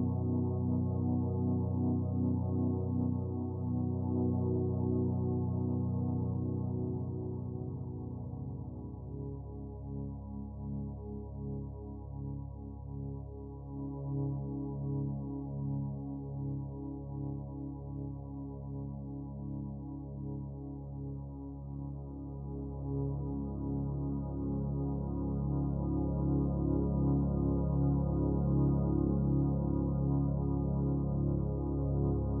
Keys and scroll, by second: 6.9-8.7 typing, 12.2 typing, 16.2 b, 20.4 b.